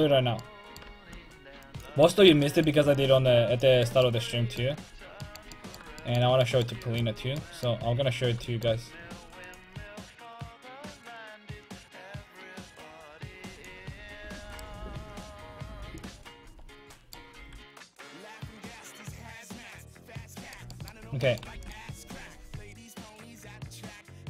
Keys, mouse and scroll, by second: 1.2-4.7 drag, 2.7-5.6 middle drag, 7.0-14.5 middle drag, 9.5-15.7 drag, 14.5-15.7 right drag, 17.0 click, 17.4 r, 21.6 ctrl+s.